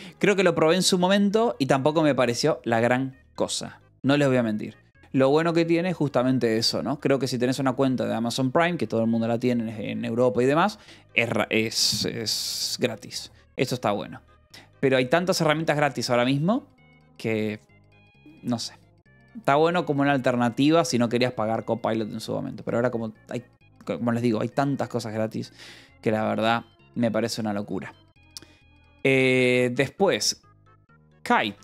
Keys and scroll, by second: 0.1 j, 1.8 k, 7.5 j, 15.0 j, 18.5 k, 30.9-31.6 typing.